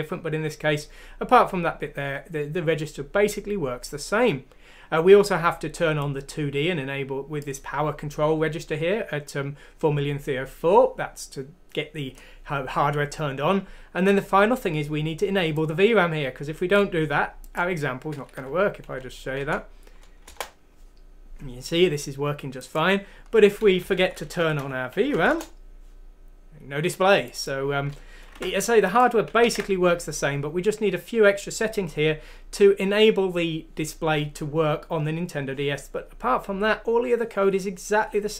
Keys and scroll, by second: 18.3 F6, 19.4 Down, 19.4 typing, 20.2 Return, 21.1 typing, 23.8 Down, 24.0 Down, 24.3 Down, 24.6 Home, 25.1 F6, 25.1 ;, 25.3 Return, 28.3 alt+Tab, 29.4 ctrl+z.